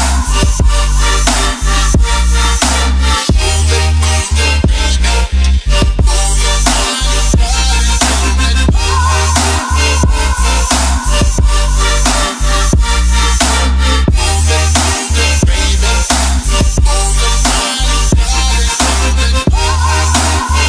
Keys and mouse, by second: 1.1 middle click, 2.0 shift+middle click, 2.3 ctrl+middle click, 2.6 middle click, 6.1-7.9 drag, 8.3-8.7 ctrl+middle drag, 9.5-10.1 drag, 11.1 Tab, 11.7 2, 12.8 alt+shift+click, 13.4 alt+shift+click, 14.2 alt+shift+click, 15.6 alt+shift+click, 18.0 alt+shift+click, 19.0 middle click, 19.8 alt+shift+click, 20.2 shift+middle click.